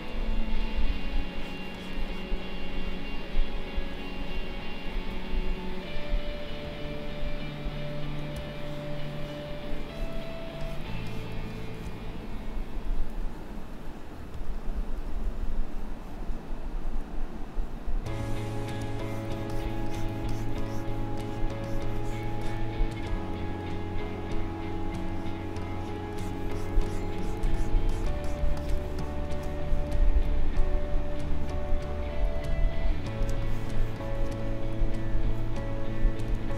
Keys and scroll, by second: 0.1 Delete, 1.1 space, 6.3 Delete, 8.3 space, 13.8 Delete, 17.8 Delete, 18.7 space, 31.3 Delete, 33.2 space, 35.5 Delete, 36.3 space.